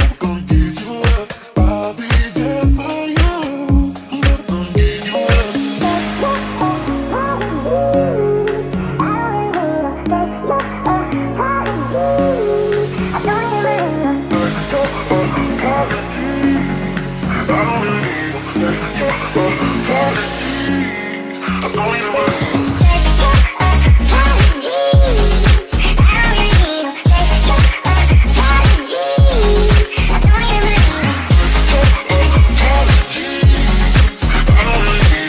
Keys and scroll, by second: 2.9-5.0 typing, 11.8-13.7 typing, 14.8 w, 15.2 d, 15.8 q, 31.1-33.0 typing, 35.1-35.2 typing.